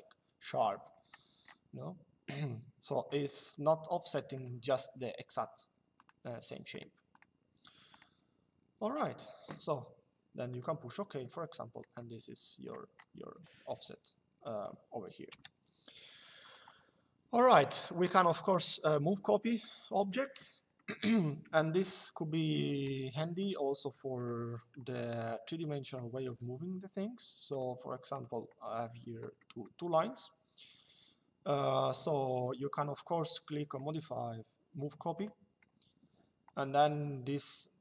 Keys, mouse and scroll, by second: 4.0 click, 5.7 click, 8.7 click, 10.3 click, 13.1 click, 15.0 Delete, 16.1 click, 19.6 click, 25.0 Escape, 25.6 middle click, 26.0 click, 27.2 click, 28.3 Escape, 29.1 middle click, 33.1 click, 34.9 click.